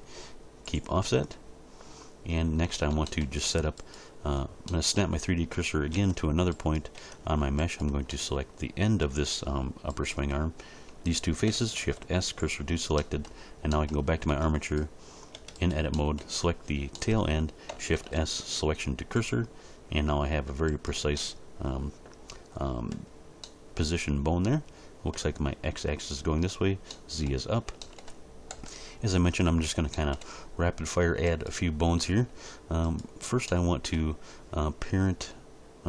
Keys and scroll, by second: 5.9 Tab, 11.8 shift+s, 14.3 Tab, 17.9 shift+s, 28.5 1.